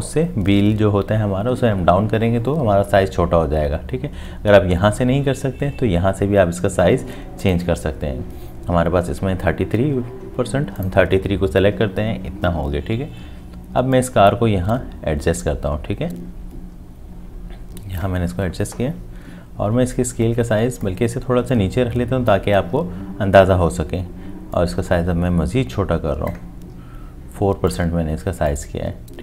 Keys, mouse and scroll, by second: 4.7-6.7 scroll up 1.